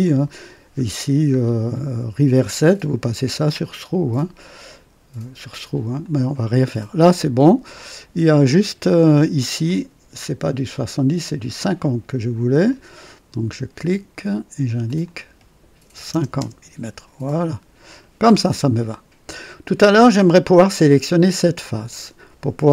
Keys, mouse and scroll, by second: 0.0 click, 0.6 scroll down 2, 3.1 click, 4.6 click, 6.0 click, 7.0-8.9 drag, 9.6 click, 11.5 click, 12.6 click, 14.8 click, 15.9 KP_5, 16.1 KP_0, 16.3 Return, 16.4 Return, 17.3 click, 18.2 scroll up 1, 18.8-19.7 drag, 19.9 right click.